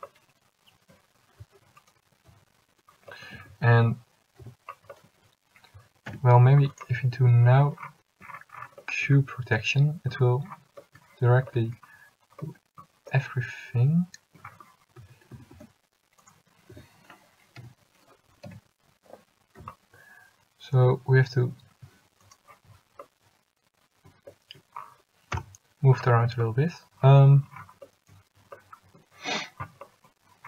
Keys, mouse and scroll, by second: 3.4 a, 4.5 l, 6.2 u, 15.1 a, 15.4 a, 15.7 s, 16.9 a, 17.8 l, 18.6 g, 25.5 KP_Decimal.